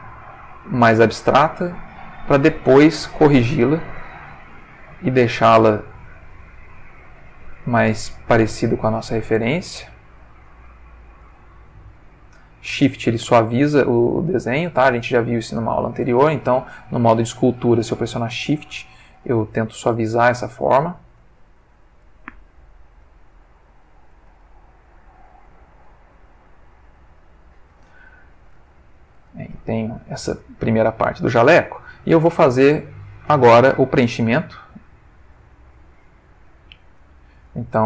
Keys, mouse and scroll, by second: 0.5 click, 2.5-4.1 shift+middle drag, 4.3 ctrl+shift+middle click, 5.6-6.8 drag, 7.3-8.5 drag, 8.6-9.4 drag, 9.5 click, 11.2-11.7 shift+drag, 12.0-12.6 shift+drag, 13.5-14.7 drag, 14.9 click, 15.9 click, 16.8 click, 18.8 ctrl+middle click, 19.4-20.8 ctrl+shift+middle drag, 21.2 click, 22.2-23.2 drag, 23.3 click, 24.4-25.6 shift+middle drag, 26.4-27.8 drag, 28.1-29.3 ctrl+middle drag, 29.4-30.1 ctrl+shift+middle drag, 31.9 Tab, 34.5 click, 36.3 click, 37.0 click.